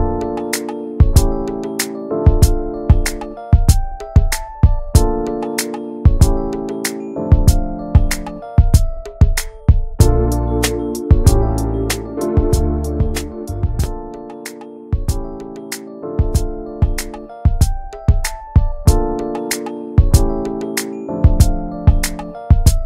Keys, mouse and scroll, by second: 0.7 alt+middle click, 1.1 alt+middle click, 1.7 alt+middle click, 2.1 shift+middle click, 2.4 click, 2.7 l, 3.2 alt+z, 3.5 scroll down 2, 3.6 shift+middle click, 4.0 s, 18.1 middle click, 18.8 Tab, 19.0 click, 19.2 click, 19.4 ctrl+a, 19.8 alt+z, 20.0 middle click, 20.4 Tab, 20.7 Tab, 20.9 click, 21.5 ctrl+a, 22.0 Tab, 22.3 middle click.